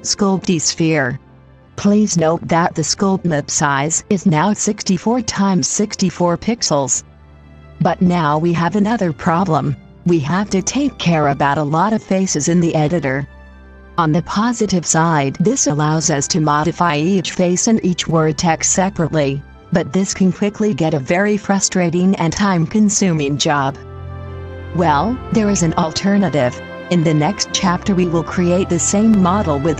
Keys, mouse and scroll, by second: 14.8-16.7 right drag, 16.1 g, 18.9-20.8 right drag, 19.7 g, 23.5-25.2 right drag, 24.3 g.